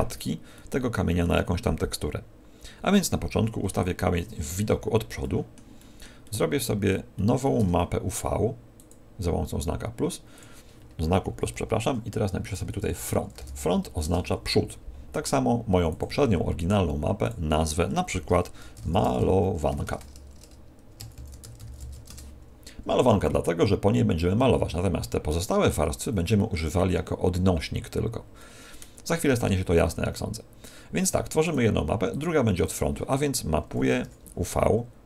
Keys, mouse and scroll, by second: 0.5 middle click, 3.6 KP_1, 5.1 shift+middle click, 5.7 shift+middle click, 7.1 shift+middle click, 8.7 click, 15.9 click, 31.4 click.